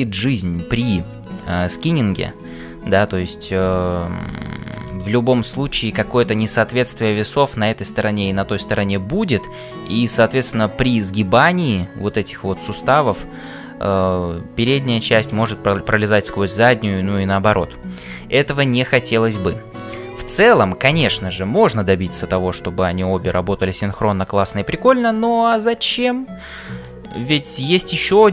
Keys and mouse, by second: 3.0-7.1 middle drag, 18.6 shift+middle click, 27.5-28.3 middle drag.